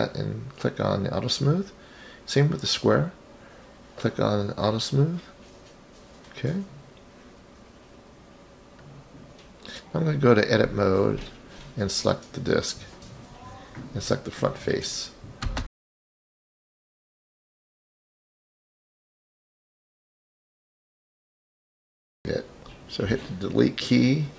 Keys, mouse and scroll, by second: 0.4 click, 1.1-1.6 scroll down 1, 1.9 click, 2.5 click, 4.0 click, 4.6 drag, 5.6-6.1 scroll up 3, 6.0 click, 7.3 click, 11.3 click, 11.8 drag, 13.7 click, 14.7 click, 15.2 click, 17.0 ctrl+i, 17.9 ctrl+i, 19.6 Delete, 22.7 click.